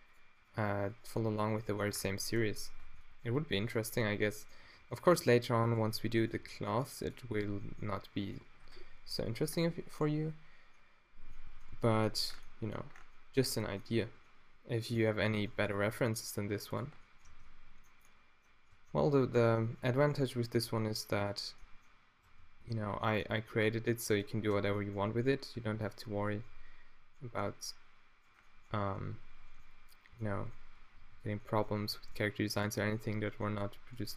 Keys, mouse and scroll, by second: 0.6 g, 1.9 Tab, 2.8 Tab, 4.8 g, 5.7 click, 6.4 g, 7.6 click, 7.6 g, 9.2 middle click, 10.1 middle click, 11.9 Tab, 14.0 Tab, 15.3-17.2 drag, 15.9 x, 17.3 Tab, 19.3 Tab, 20.0-23.0 drag, 20.6 g, 21.3 right click, 22.3 Tab, 23.0 scroll up 1, 23.2 click, 24.2 scroll up 1, 24.5 Tab, 25.6 a, 26.4 b, 26.6 click, 28.1 click, 28.8 b, 30.1 b, 31.0 b, 34.0 e.